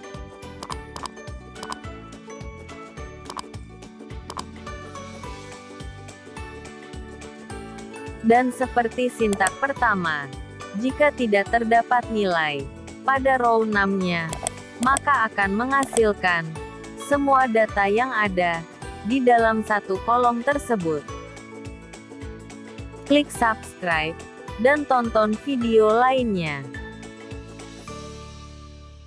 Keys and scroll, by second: 16.6 F9.